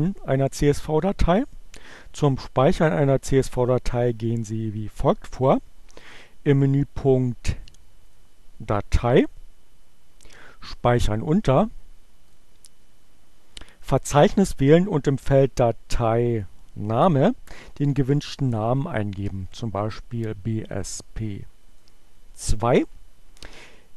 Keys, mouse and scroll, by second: 8.2 click, 11.7 click, 19.9 click, 21.0 2.